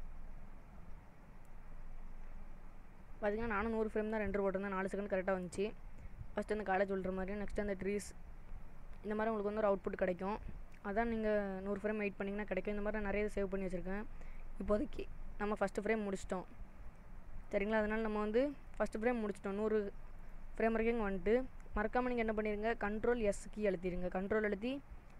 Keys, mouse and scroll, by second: 20.3 click.